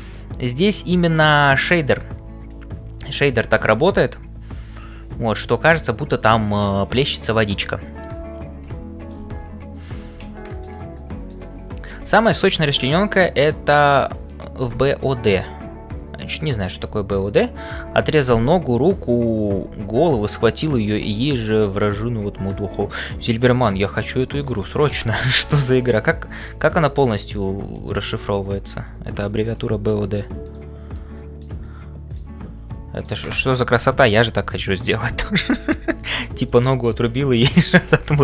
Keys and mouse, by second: 0.0-38.2 typing, 10.3 shift+middle click, 10.9 middle click, 24.2 shift+middle click, 24.7-25.9 middle drag, 29.2 shift+middle click, 29.6 middle click, 30.5 click, 31.2 shift+middle click, 31.6 middle click, 32.9 click, 35.5 click.